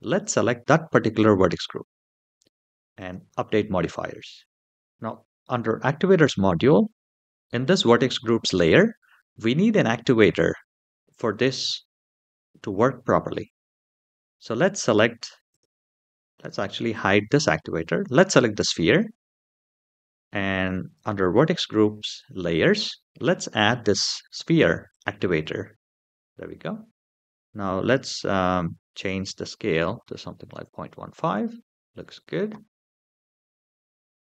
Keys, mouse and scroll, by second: 2.7 click, 4.1-4.7 middle drag, 15.3 click, 16.7 click, 17.7 click, 20.7 click, 23.3-25.4 drag, 27.0-28.4 scroll down 2, 28.7-30.3 drag, 33.6-34.0 scroll up 2.